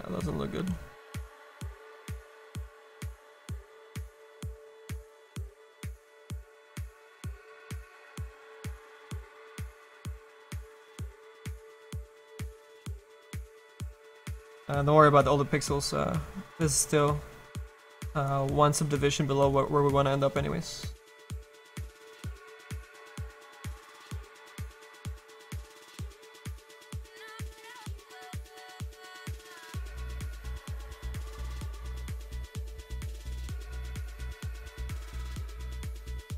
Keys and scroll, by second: 15.9 s, 21.5 s.